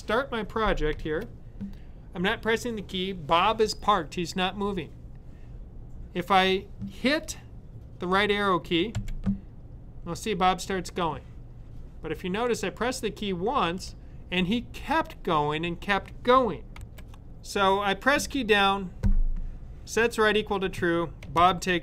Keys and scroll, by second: 8.8 Right.